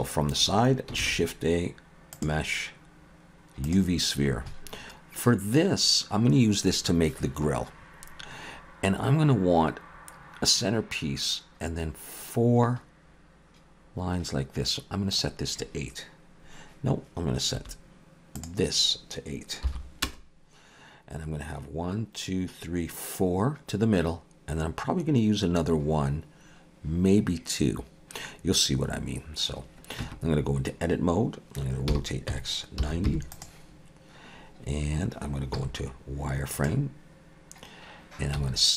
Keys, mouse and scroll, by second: 0.0 KP_3, 1.0 shift+a, 15.1 click, 17.6 click, 17.6 `, 18.3 click, 30.0 Tab, 31.9 r, 35.6 z, 38.3 s.